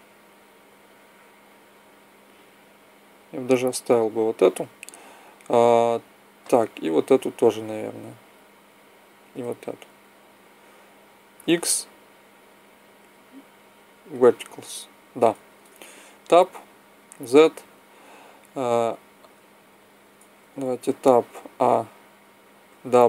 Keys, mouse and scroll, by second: 10.2-14.0 right drag, 11.3 x, 15.4 Tab, 16.8 z, 20.3 Tab, 21.2 a, 22.5 w.